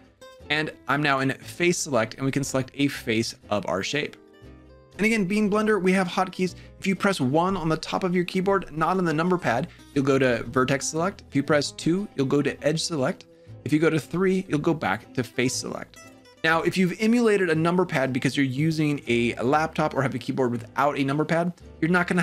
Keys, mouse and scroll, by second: 1.0 click, 4.6 1, 4.6 3, 9.7 1, 11.6 2, 13.9 3.